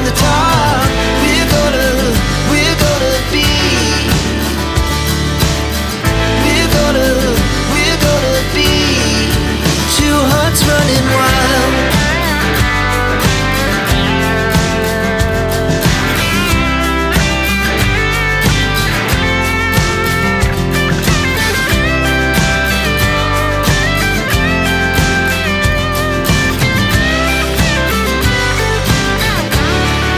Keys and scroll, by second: 0.0 t, 0.1 space, 1.7 r, 1.8 space, 5.0-5.6 typing, 5.9 Return, 8.5 f, 8.6 space, 11.2 space, 15.9 space, 20.7 f, 20.9 space, 21.8 Escape, 26.5 space.